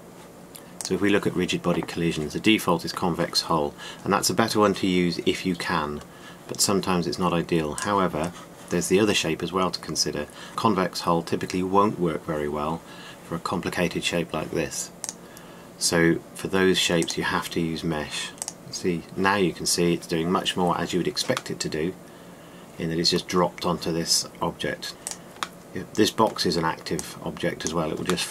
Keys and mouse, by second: 1.6-2.7 drag, 1.6 right click, 3.2 typing, 15.7-18.0 drag, 19.2 click, 22.2 middle drag, 25.3 middle drag, 25.8-26.3 right drag, 26.5-27.6 middle drag.